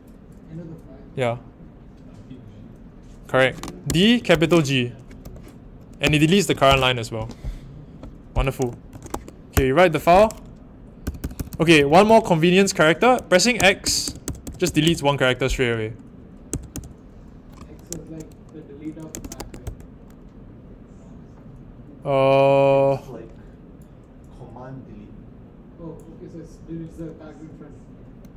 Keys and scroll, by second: 3.6-6.6 typing, 8.6-9.5 typing, 11.0-12.0 typing, 13.5-14.8 typing, 16.4-17.1 typing, 18.9-19.8 typing.